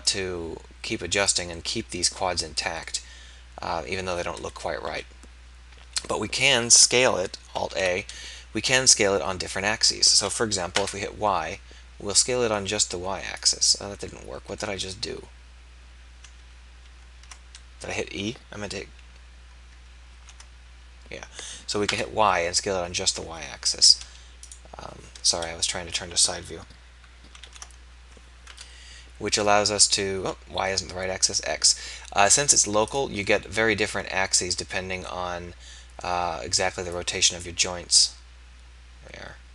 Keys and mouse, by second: 1.6 middle click, 4.5 KP_1, 4.9 KP_3, 7.8 alt+a, 10.9 y, 16.5 ctrl+z, 16.8 ctrl+z, 20.3 ctrl+a, 25.3 KP_3, 27.5 ctrl+a, 32.9 click.